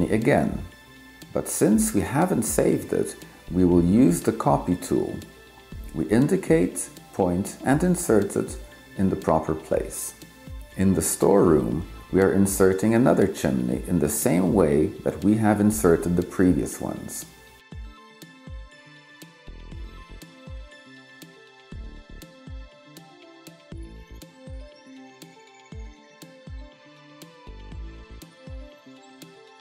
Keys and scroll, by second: 17.2-18.2 typing, 19.9-20.8 typing.